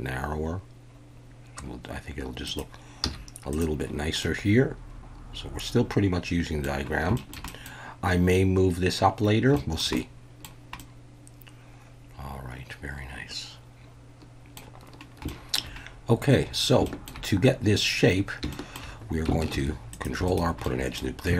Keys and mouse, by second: 2.4 click, 3.0 z, 4.2-6.6 middle drag, 7.2 shift+middle click, 7.5 middle click, 9.6 shift+middle click, 10.0-10.4 middle drag, 10.8-14.6 middle drag, 15.3 shift+middle click, 16.9 shift+middle drag, 18.5 shift+middle click, 19.5 ctrl+r, 20.2 right click, 20.6-21.0 middle drag.